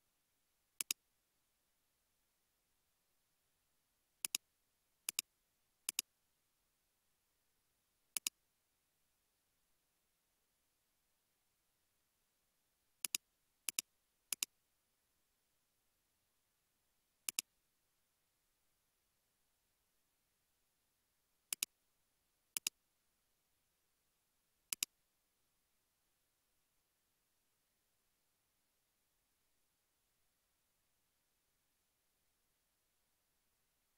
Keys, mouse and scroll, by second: 3.3 space, 9.0 space, 12.0 space, 17.8 space, 20.6 space, 33.2 space.